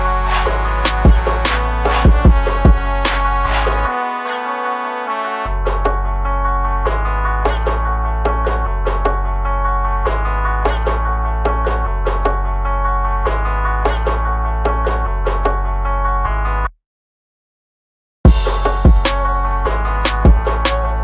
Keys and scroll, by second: 0.1 ctrl+z, 2.5 ctrl+z, 15.0 ctrl+z, 16.4 ctrl+z, 18.5 ctrl+z, 19.4 ctrl+z.